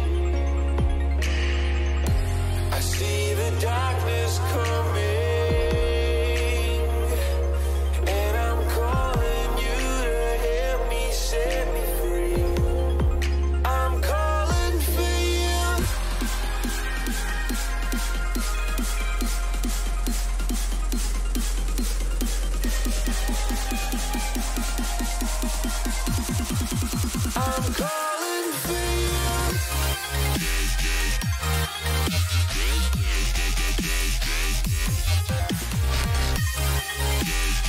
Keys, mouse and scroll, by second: 26.2 KP_3, 29.2 a, 29.5 a, 31.3 k.